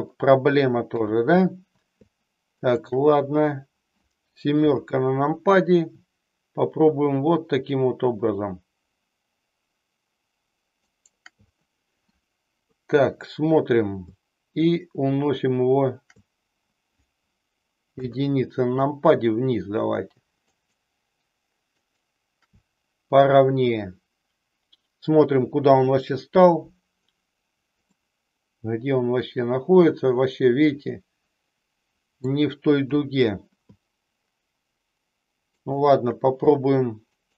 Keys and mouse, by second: 4.5 KP_7, 10.9 shift+right click, 12.6 KP_3, 17.9 KP_1, 25.6 KP_3, 27.9-32.2 middle drag, 32.7 KP_3, 35.6 shift+right click.